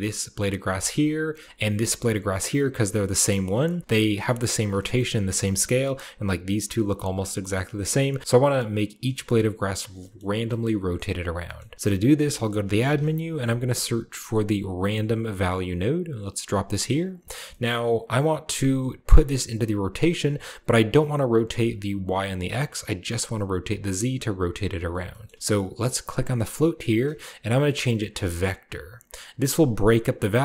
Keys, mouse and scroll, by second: 0.6 scroll down 2, 1.2-1.7 shift+middle drag, 1.9-3.4 shift+middle drag, 1.9-3.4 scroll up 2, 3.7-4.1 middle drag, 4.3-4.6 shift+middle drag, 4.8 shift+middle drag, 5.0-6.7 shift+scroll up 1, 5.2-6.8 shift+middle drag, 6.7-7.9 scroll down 1, 7.2-8.8 shift+middle drag, 7.9-8.8 scroll down 1, 8.8-9.8 shift+scroll down 1, 9.1 shift+middle click, 10.0 middle drag, 10.5-11.3 middle drag, 11.4 shift+middle click, 11.7-12.8 typing, 11.9-14.7 shift+drag, 14.8-16.9 drag, 16.5-17.7 scroll down 1, 16.6-19.8 middle drag, 17.1-18.5 drag, 17.7-18.5 scroll up 1, 18.5-19.8 scroll up 1, 20.7-21.7 drag, 21.6 right click, 21.9 click, 22.3 right click, 22.7-24.7 drag, 24.6 right click, 24.9-25.3 middle drag, 25.3 click, 25.4-26.0 middle drag, 26.0 click, 28.2 drag, 29.0 click.